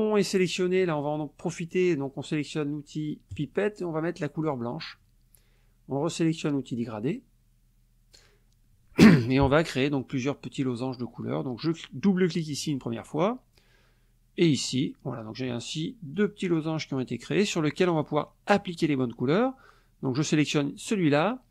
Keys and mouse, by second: 3.3 click, 4.4 click, 6.8 click, 12.5 click, 14.6 click, 16.1 click, 16.9 click, 18.0 click, 20.8 click.